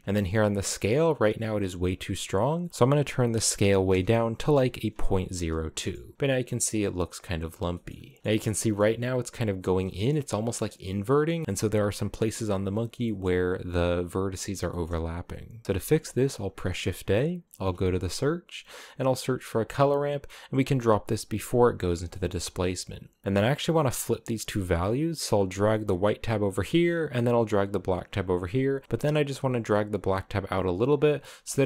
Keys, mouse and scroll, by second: 2.2-4.9 drag, 4.9 a, 5.4 shift+middle click, 5.9-6.2 scroll up 5, 6.2-7.2 scroll down 1, 7.2 scroll down 3, 7.4 shift+middle click, 8.2-9.4 scroll up 2, 8.2 shift+middle click, 9.4 scroll down 2, 9.6-10.7 shift+middle drag, 10.7-11.1 scroll down 1, 11.1-12.3 shift+middle drag, 12.3-12.7 scroll down 1, 12.7 shift+middle click, 13.5-14.1 scroll down 1, 14.1 scroll up 1, 14.3-15.6 middle drag, 15.6 shift+a, 21.4 click, 21.7 scroll up 1, 21.8-23.2 middle drag, 23.2-30.8 drag, 30.8-31.2 scroll down 2, 31.2-31.6 shift+middle drag.